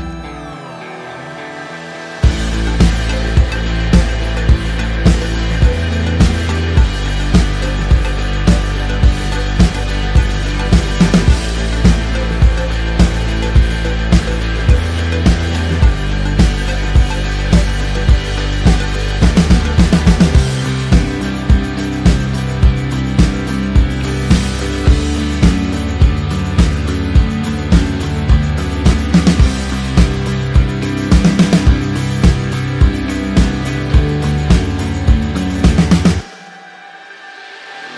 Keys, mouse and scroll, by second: 1.7 Return, 1.8 [, 3.1 click, 12.9 Return, 15.2 ctrl+o, 16.3 click, 18.1-18.8 typing, 22.5 right click, 23.1 click, 23.9 ctrl+t, 24.9 alt+click, 26.0 click, 29.3 click, 30.6 KP_Enter, 32.0 click.